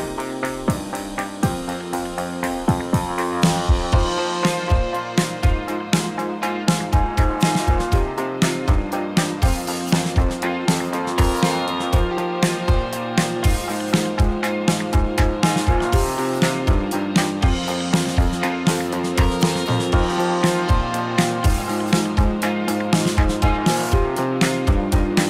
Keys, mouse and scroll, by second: 2.4 drag, 2.6 middle drag, 2.8 r, 3.3 click, 3.4-6.8 middle drag, 6.8 click, 6.9-8.1 middle drag, 8.1 click, 8.4-8.9 middle drag, 8.9 r, 9.6 middle click, 10.0 drag, 10.2 r, 10.6 drag, 10.7-12.4 middle drag, 12.4 click, 12.6-13.3 middle drag, 13.3 r, 14.6-15.3 middle drag, 15.3 r, 15.8 drag, 15.9-16.5 middle drag, 16.5 `, 18.0 click, 18.6 r, 19.2 click, 19.4 r, 21.5 drag, 21.7 r, 22.8 click, 22.9 r, 23.6 click, 23.7 r, 24.9 click, 25.0 r.